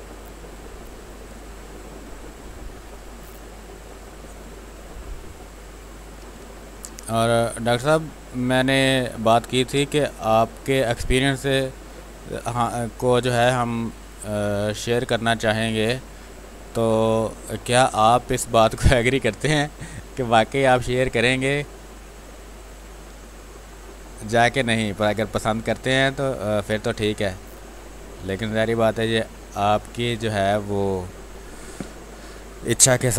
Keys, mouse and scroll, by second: 0.3 click, 1.3 space, 1.5 click, 1.9 space, 3.1 click, 3.9 space, 4.1 click, 4.4 space, 5.1 click, 6.2 z, 6.5-9.2 drag, 9.2 click, 9.7 space, 9.8 click, 12.0 space, 12.0-16.2 drag, 16.2-17.5 drag, 17.5 space, 17.7 click, 18.1 space, 18.8-20.4 drag, 20.4-24.2 drag, 24.2 space, 24.3 click, 24.7 space, 25.0 x, 25.7 click, 26.9 x, 27.4-29.0 drag, 29.0 space, 29.4 alt+click, 31.7 r, 32.0 click, 32.9 b.